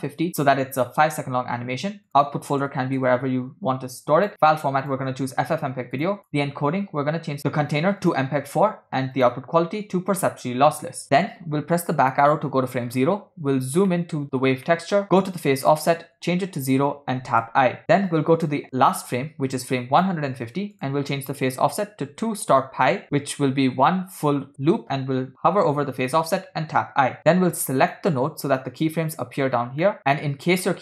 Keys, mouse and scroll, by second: 1.1 scroll down 4, 2.1-3.1 drag, 2.9 /, 4.2-5.0 drag, 5.5 scroll down 2, 6.0 click, 6.3 click, 6.8 scroll down 2, 7.4-8.2 drag, 9.2-10.6 drag, 11.8 Left, 13.0 scroll down 1, 14.0 middle click, 14.8 middle click, 15.6-16.8 drag, 17.6 i, 18.1 click, 19.2 click, 20.8-24.5 drag, 26.8 i, 27.9 click, 30.0 middle click, 30.0-30.6 scroll down 4, 30.7 middle click.